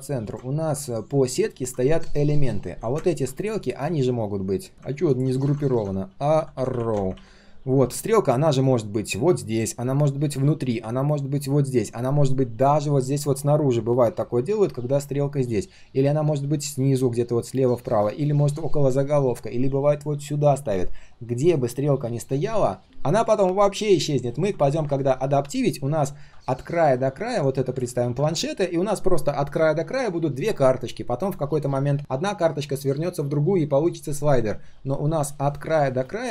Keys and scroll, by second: 5.4 ctrl+g, 5.7 ctrl+r, 7.1 ctrl+s.